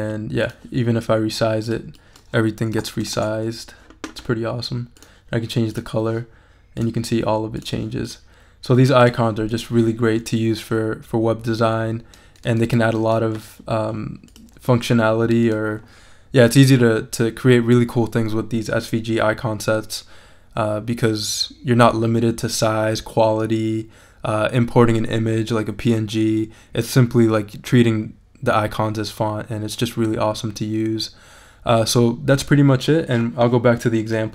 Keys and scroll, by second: 2.5-3.4 typing.